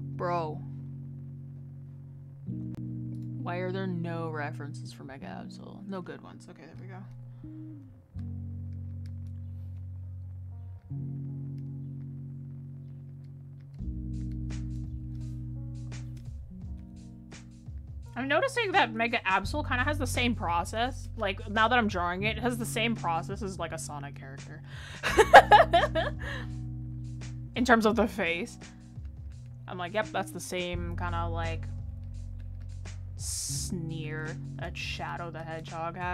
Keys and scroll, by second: 15.9 ctrl+z.